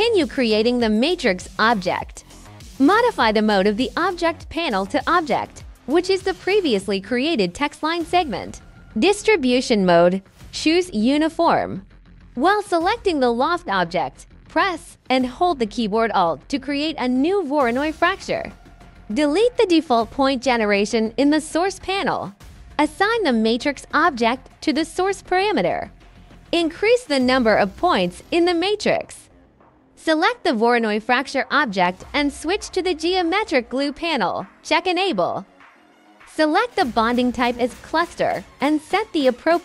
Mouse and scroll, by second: 1.7 click, 2.3 click, 2.7 click, 4.2-5.3 drag, 6.6 click, 7.7 click, 8.7 right click, 9.1 click, 9.7 right click, 10.3 click, 11.1 click, 12.3-13.5 drag, 15.4 click, 16.3 click, 17.2 click, 17.9 click, 20.1 click, 23.6 right click, 24.7-26.3 drag, 26.9 click, 27.7-29.3 drag, 30.5 click, 33.1 click, 34.2 click, 35.9 click, 37.1 click, 39.2-39.6 drag.